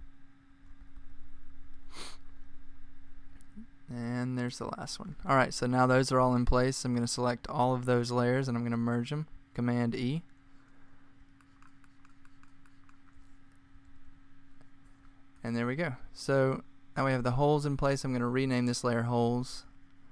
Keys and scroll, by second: 1.1 alt+Right, 1.2 alt+Right, 1.8 alt+Right, 11.5 Right, 12.7 super+e, 18.7-20.0 typing.